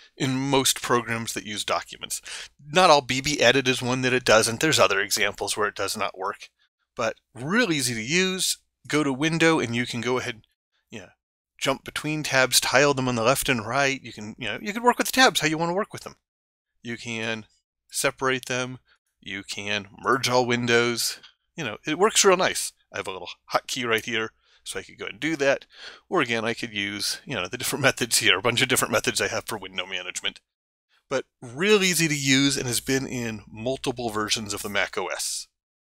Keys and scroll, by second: 24.0 ctrl+alt+4.